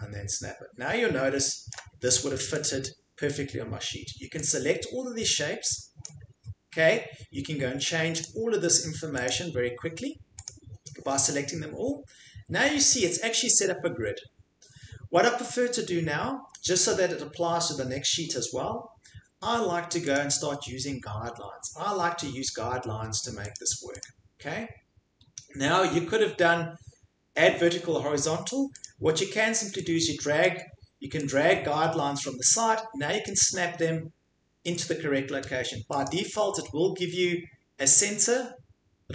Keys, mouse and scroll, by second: 1.7 ctrl+click, 2.6 click, 5.2 click, 6.0 click, 8.2 click, 9.2 click, 10.4 click, 20.1 click, 23.5 click, 24.0 click, 28.8 click, 30.0 click, 30.4 click, 33.3 click, 36.1 click.